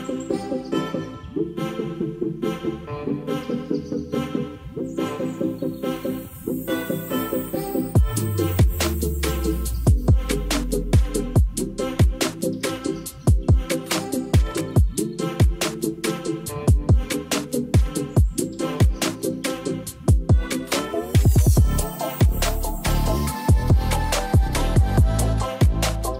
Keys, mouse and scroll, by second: 0.9-1.3 drag, 2.4-3.4 drag, 4.1-5.7 drag, 6.7 click, 7.4 r, 7.5 x, 9.3 r, 9.5 x, 11.8 click, 12.8 middle click, 13.2 middle drag, 13.5 click, 13.8 Tab, 13.9 click, 14.3 g, 14.4 y, 15.2 Tab, 15.4 click, 15.7 g, 15.9 z, 16.8 click, 17.2 KP_0, 18.5 r, 19.5 x, 23.0 ctrl+s, 24.6 click, 24.8 click, 25.2-25.6 drag.